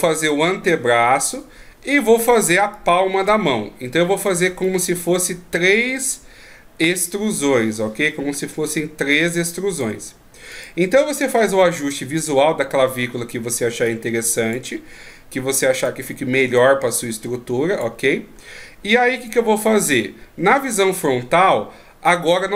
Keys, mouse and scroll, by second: 0.3 click, 1.3-3.3 typing, 1.6-2.1 scroll down 2, 2.7 click, 4.5 d, 4.7 right click, 9.8 d, 10.5 right click, 13.8 click, 15.7 right click, 16.6 click, 18.4-18.9 scroll up 1, 18.9 scroll up 1, 19.2 right click.